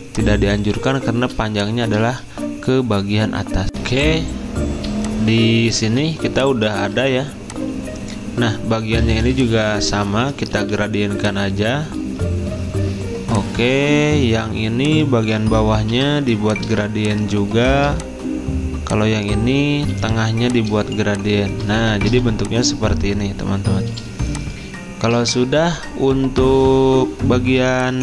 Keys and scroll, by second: 3.7 alt+Tab, 3.7 F9, 3.7 z, 4.9 v, 6.7 ctrl+z, 9.0 i, 10.5 g, 15.1 ctrl+z, 15.9 i, 19.9 typing, 23.8-24.6 typing, 27.3-28.0 typing.